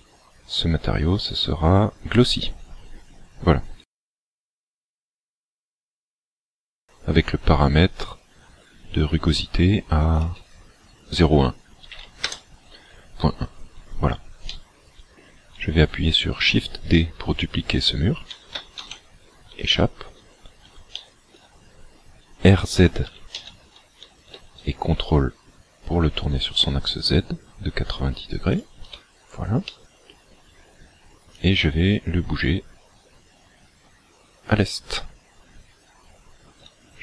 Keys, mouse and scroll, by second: 10.2 click, 14.5 middle click, 18.3 shift+d, 19.7 shift+middle click, 21.0 shift+middle click, 23.2 r, 28.6 ctrl+click, 29.6 middle click, 31.3 click, 36.0-37.0 scroll down 3.